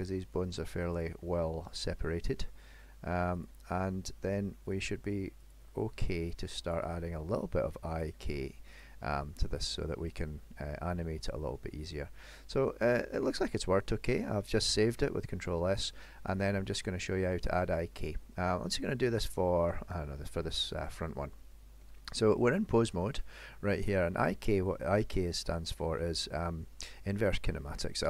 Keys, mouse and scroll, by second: 1.0 click, 1.2 r, 2.1 middle click, 3.5 click, 3.8 r, 5.4 click, 5.7 r, 6.7 click, 7.0 r, 8.0 click, 8.4 r, 9.3 middle click, 10.5 scroll down 2, 11.0 middle click, 12.4 middle click, 13.4 ctrl+s, 14.0-14.7 scroll up 2, 14.8 shift+middle click, 16.4 click, 17.0 middle click, 19.3 middle click, 19.9 shift+middle click, 20.8 click, 21.3 middle click, 22.1 middle click, 25.0 middle click.